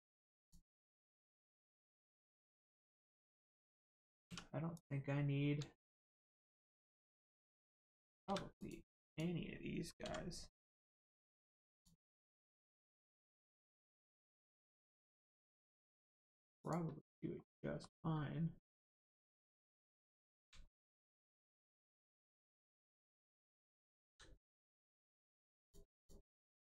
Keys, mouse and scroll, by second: 0.4 click, 0.9 middle click, 2.7 Tab, 5.4 scroll up 1, 5.7 shift+middle click, 8.3 3, 8.6 click, 10.0 x, 11.7 click, 12.2 middle click, 14.0 1, 14.4 click, 15.6 middle click, 16.6 click, 17.4 middle click, 20.0-20.5 scroll up 1, 20.7 shift+middle click, 25.6 click, 26.0 shift+click.